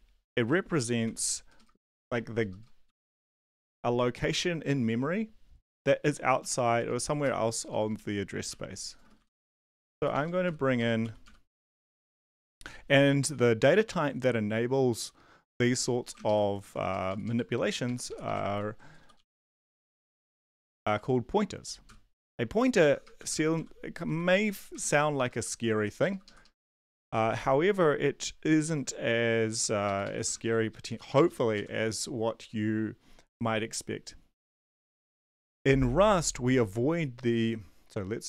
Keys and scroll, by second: 0.3-2.5 typing, 2.8 Home, 5.8-12.9 typing, 9.1 End, 16.2 Left, 16.6 ctrl+c, 16.9 Down, 17.1 Down, 17.2 Down, 17.7 Right, 18.1 Right, 18.2 Right, 18.5 ctrl+v, 19.0-21.3 typing, 22.8-25.3 typing, 25.8 Right, 26.1 Left, 26.2 Left, 26.4 Left, 26.9 BackSpace, 27.2 n, 28.6 ctrl+Right, 29.8 Right, 30.0 Right, 30.2 BackSpace, 30.5 <, 30.9 Right, 31.1 >, 31.5 Right.